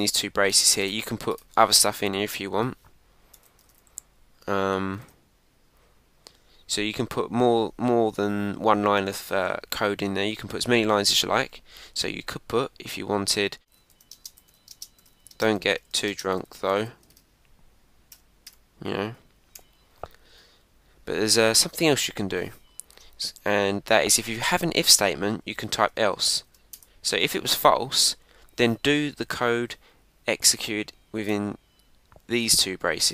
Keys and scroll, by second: 2.3 Return, 5.0 shift+', 17.1 shift+1, 18.9 Right, 20.3 Down, 23.3 Return, 25.5 Return, 26.1 Return, 26.7 Return.